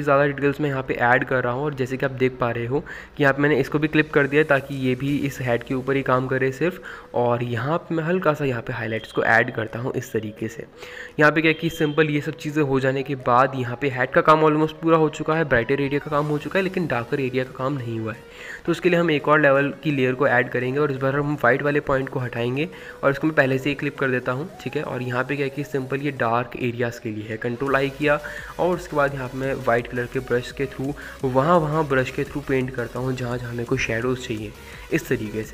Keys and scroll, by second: 2.1-3.6 typing, 10.9 ctrl+z, 26.3 ctrl+i, 29.9-31.0 typing.